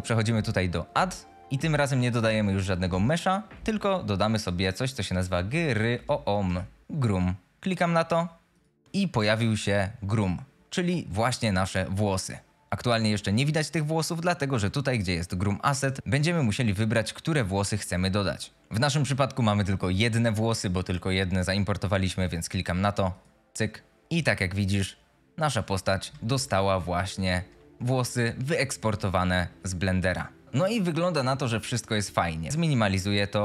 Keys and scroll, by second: 11.5 F22, 24.8 F22, 25.7-27.1 typing, 28.2 d, 29.6 a, 30.3 a.